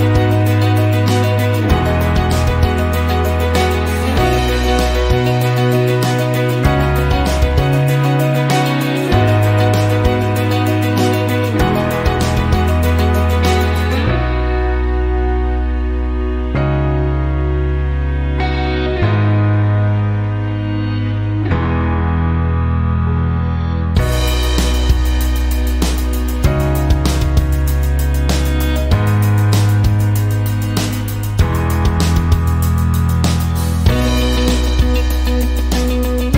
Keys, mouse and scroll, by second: 2.7 click, 4.8 click, 10.1 click, 11.9 click, 13.8 click, 15.2 click, 15.8 right click, 17.0 click, 19.6-21.3 scroll down 5, 22.6-22.9 scroll up 1, 24.1 click, 25.6 click, 26.8 click, 28.2 click, 35.3 click.